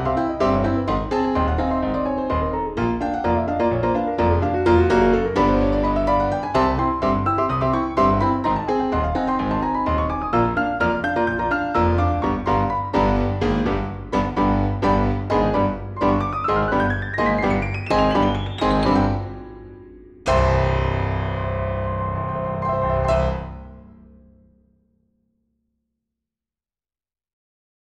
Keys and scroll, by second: 1.6 ctrl+r, 2.1 ctrl+shift+a, 5.5 F3, 6.1 F4, 7.0 F3, 7.4 Escape, 7.5 F2, 11.0 Escape, 12.9 Escape, 13.1 F3, 13.6 Escape, 13.6 F2, 18.5 Escape, 21.6 F2, 24.3 Escape, 24.5 F4, 24.8 F3, 25.0 Escape, 26.2 shift+F2.